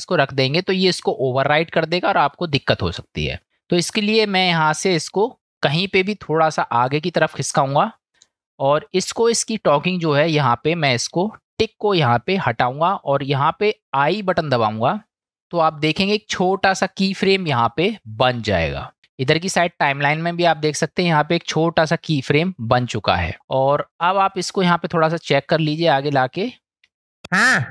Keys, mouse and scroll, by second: 2.5 middle click, 3.4-4.5 drag, 5.9-8.3 drag, 12.5 click, 24.0 middle click, 26.2 click, 27.3 space.